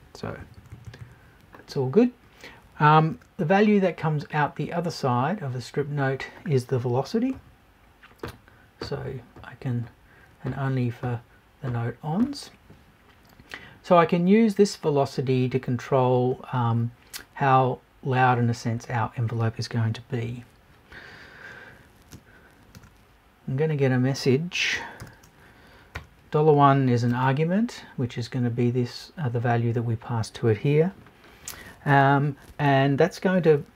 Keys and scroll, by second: 0.4 Left.